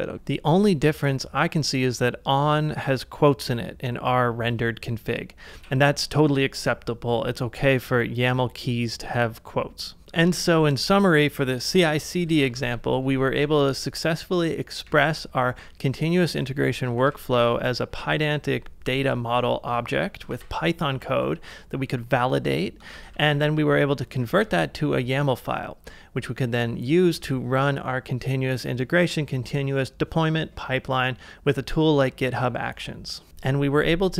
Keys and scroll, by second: 0.1 super+Tab, 5.5 super+Tab, 10.0 typing, 12.2-13.4 typing, 14.9 Return, 16.4 k, 17.0 shift+v, 17.4 shift+4, 18.2 shift+5, 20.4 ctrl+c, 20.9 j, 21.3 j, 22.8-24.2 typing, 24.4 Return.